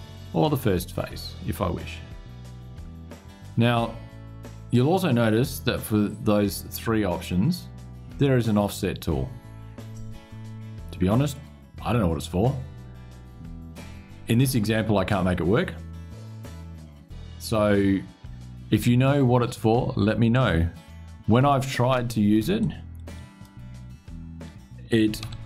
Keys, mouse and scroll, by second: 22.3 click, 24.9 KP_5, 25.3 KP_Enter.